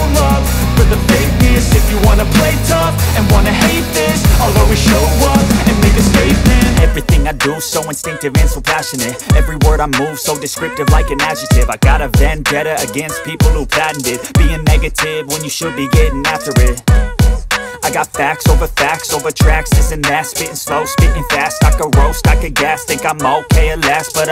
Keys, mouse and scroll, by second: 0.5 scroll up 1, 0.7 Delete, 2.2-4.4 drag, 7.9 alt+click, 8.9 click, 10.4 click, 11.1 z, 11.8 ctrl+0, 12.8 right click, 13.6 click, 17.2 alt+click, 17.8-19.8 drag.